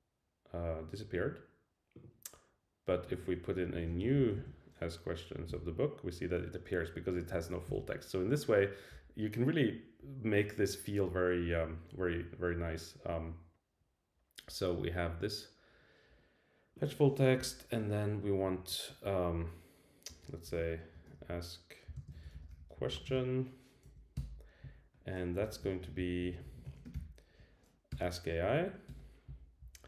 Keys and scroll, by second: 5.5 Return, 7.3 shift+Down, 17.4 Return, 23.8 Right, 24.2 Return, 25.4 Down, 27.9 Return, 28.6 Right, 28.9 Return.